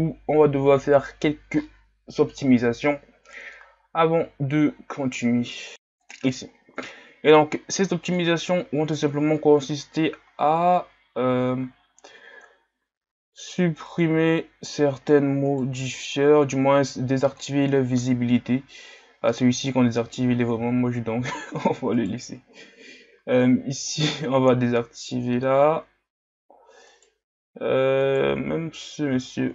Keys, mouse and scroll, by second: 8.2-9.4 drag, 9.4 shift+scroll down 4, 13.9-15.6 drag, 15.6-17.3 right drag, 17.3-20.7 drag, 20.7-21.5 shift+scroll down 12, 22.0-23.9 right drag, 23.9-27.0 drag, 27.0-29.2 right drag, 29.2-29.5 shift+scroll up 3.